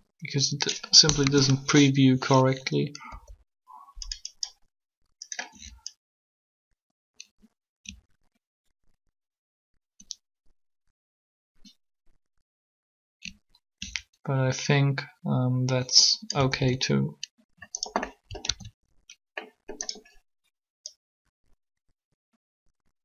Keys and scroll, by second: 1.0 3, 3.1 r, 16.6 alt+a, 18.4 alt+a.